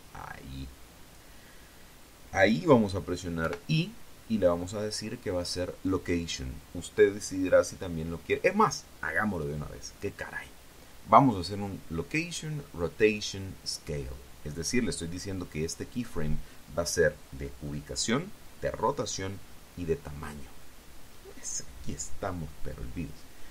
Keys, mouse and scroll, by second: 0.6 click, 4.2 i, 16.8 click.